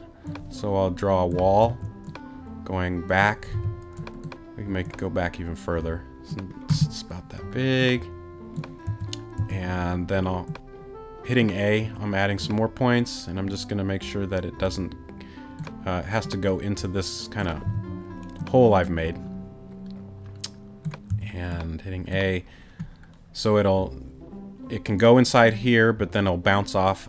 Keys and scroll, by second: 1.6 a, 3.5 t, 8.9 a, 17.6 t, 21.1 a.